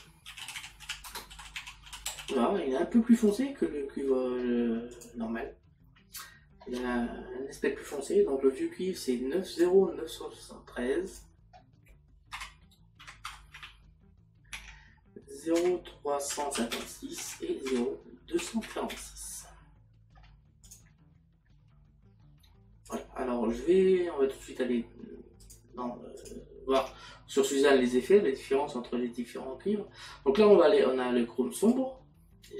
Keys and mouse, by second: 4.9 click, 9.6 click, 14.6 Tab, 17.7 KP_Decimal, 22.9 click, 25.5 click.